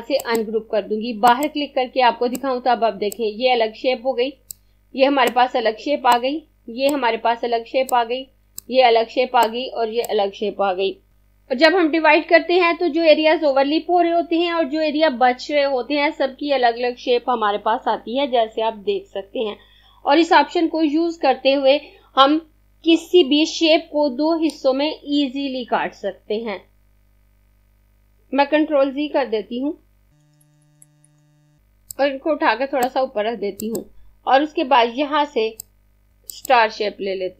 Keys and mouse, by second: 0.2 click, 28.8 ctrl+z, 29.5 ctrl+z, 30.0-31.2 typing, 31.6 click, 36.4 click.